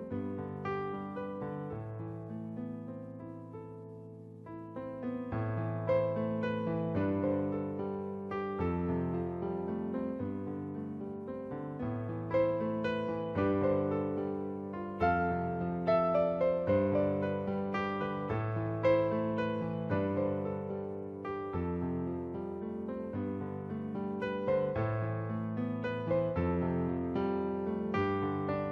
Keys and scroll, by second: 0.5-2.5 typing, 3.6-4.0 typing, 10.2-11.4 typing, 13.9 ], 18.1-18.7 typing, 20.1 ctrl+z, 24.3 ctrl+z.